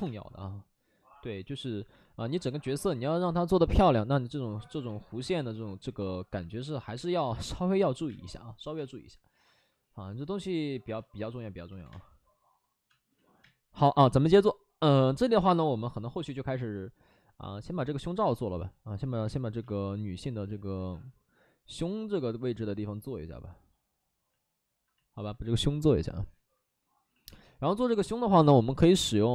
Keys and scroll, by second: 0.0 space, 6.9 space, 8.0 space, 8.7 space, 9.4 2, 10.9-13.3 typing, 13.1 ctrl+z, 13.6 ctrl+z, 18.2 ctrl+z, 18.5 ctrl+z, 19.2 space, 19.5 space, 24.7 space, 27.1 x, 28.4 ctrl+z.